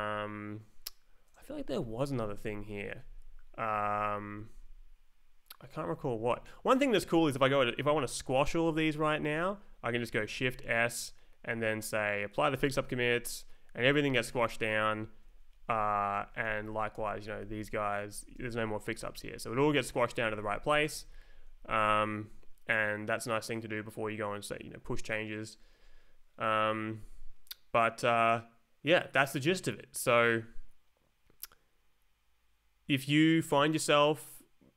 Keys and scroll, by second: 2.4 Escape, 2.9 Down, 4.5 Up, 5.7 Up, 8.8 Down, 10.3 shift+s, 12.5 Return, 14.3 Down, 15.5 Up, 16.4 Left, 16.8 Down, 16.9 Return, 17.5 Down, 17.9 Escape, 18.2 Down, 18.3 Return, 18.8 Down, 19.4 Up, 19.9 Escape, 20.2 Up, 20.8 Right, 20.9 Up.